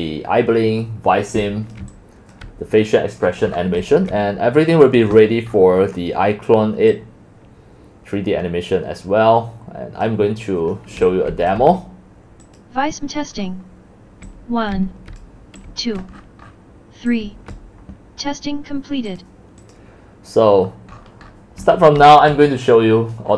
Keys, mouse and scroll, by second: 1.3-2.4 typing, 4.0 typing, 4.2 click, 5.0 click, 7.0-7.5 drag, 8.3-8.9 drag, 10.9-11.8 typing, 12.6 click, 13.5-17.2 typing, 17.2-17.6 drag, 19.2 click, 22.0 x.